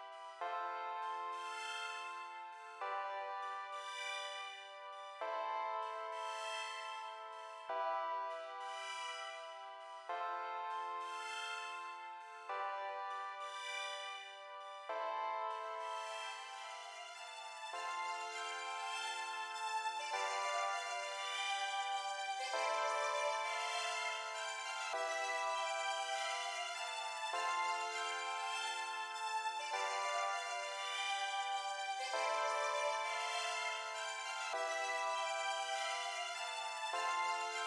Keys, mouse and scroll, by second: 2.4 click, 4.9 click, 11.3 click, 12.9-13.9 drag, 24.9 click, 26.7 click, 29.8 click, 30.9 click, 31.9 click.